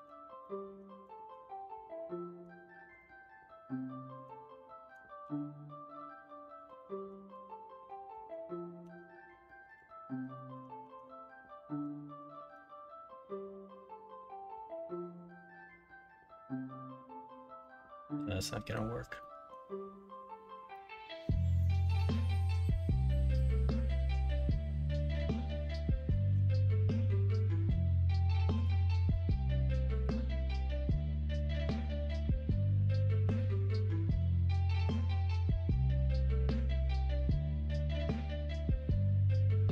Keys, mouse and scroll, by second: 0.4 middle click, 1.1 alt+z, 1.5 middle click, 2.9-4.2 middle drag, 5.2 shift+s, 7.3 middle click, 7.9 middle click, 8.9 Tab, 9.4 middle click, 10.0 alt+z, 10.3 middle drag, 10.8 shift+a, 12.7-14.9 middle drag, 17.6-18.7 middle drag, 19.2-19.5 middle drag, 20.8-21.9 middle drag, 23.1-25.7 middle drag, 26.1 middle click, 33.7-34.2 middle drag, 34.9-38.5 shift+middle drag, 35.1 shift+a.